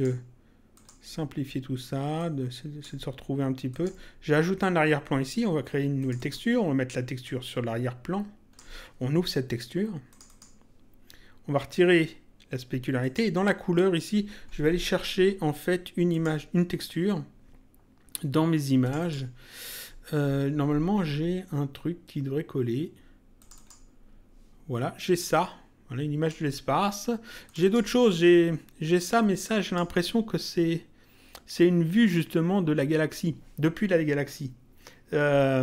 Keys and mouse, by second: 2.1 click, 3.7 click, 6.0 click, 10.1 click, 13.0 click, 16.1 click, 18.8 click, 23.3 click, 25.2 click, 27.4 click, 29.1 click.